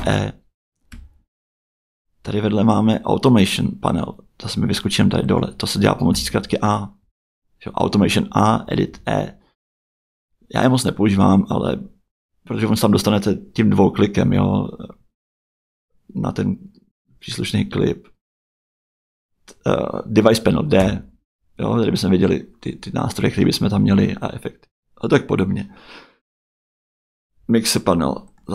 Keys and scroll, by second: 0.0 e, 6.1 a, 8.6 e, 20.8 d, 23.7 d.